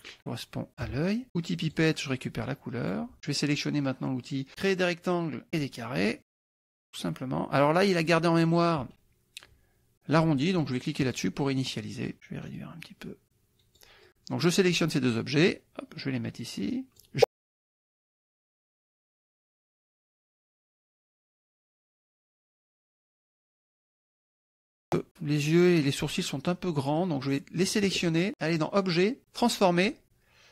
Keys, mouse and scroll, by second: 1.7 click, 2.9 click, 5.5 click, 6.3-8.0 drag, 11.1 click, 12.7-14.0 drag, 15.5-25.6 drag, 27.0 click, 28.5 click, 29.6 click.